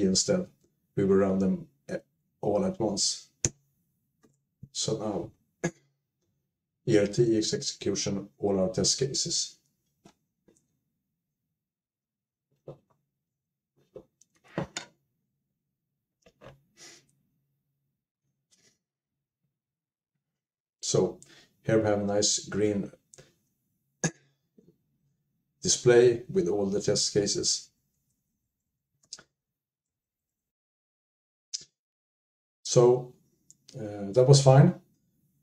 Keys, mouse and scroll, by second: 4.1-6.5 typing, 8.5-9.2 typing, 11.1-18.2 typing, 13.5 Return, 13.5 ctrl+u, 17.3 alt+x, 17.3 alt+>, 26.4 Up, 26.6 Up, 27.0 Right, 27.2-27.8 Right, 28.1 Right, 28.3 Right, 28.6 Right, 28.8 Right, 29.0 Right, 29.4 Left, 29.6 Left, 30.1 Right, 30.2 typing, 30.4 Right, 30.5 Tab, 30.5 Up, 30.5 Down, 30.5 click.